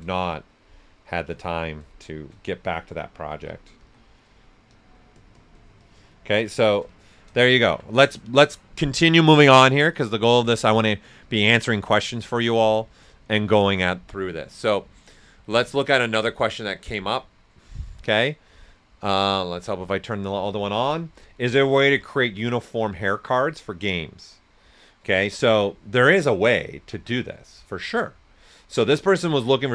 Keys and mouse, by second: 2.9-4.2 typing, 3.8 click, 4.2 right click, 4.7 click, 6.1 shift+click, 7.2 right click.